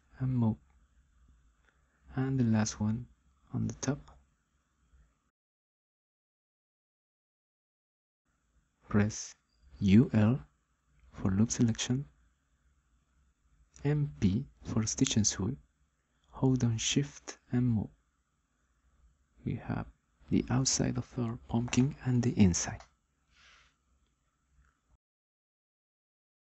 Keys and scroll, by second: 9.0-9.9 typing, 14.7 m, 15.9 p.